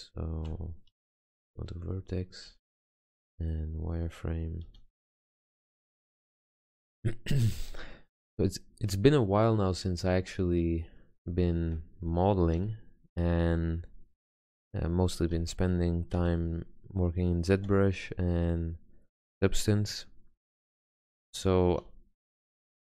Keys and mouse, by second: 0.6 Tab, 1.6 Tab, 3.2 z, 4.8 a, 5.9 b, 7.9 g, 11.8 a, 12.7 b, 13.6 g, 15.5 a, 16.3 b, 17.7 g, 20.9 a, 22.0 b, 22.8 g.